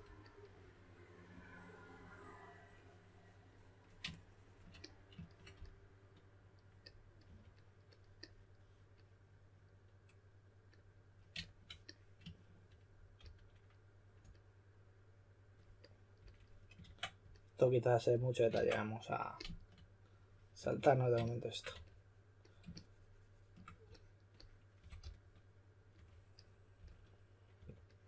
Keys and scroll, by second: 1.3 3, 5.5 s, 7.0-7.7 typing, 13.1 s, 16.8 super+z, 18.5 super+z, 20.5 3, 21.7 3, 24.5-27.5 typing.